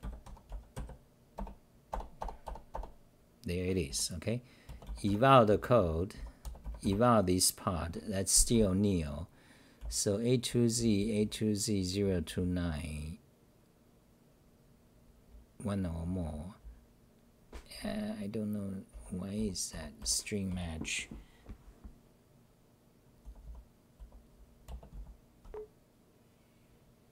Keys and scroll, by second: 0.0-1.2 typing, 1.3 Return, 3.9 d, 5.2-6.8 typing, 8.5-10.6 typing, 18.7-21.0 typing, 23.2 t, 23.4 t, 24.0 c, 24.3 c.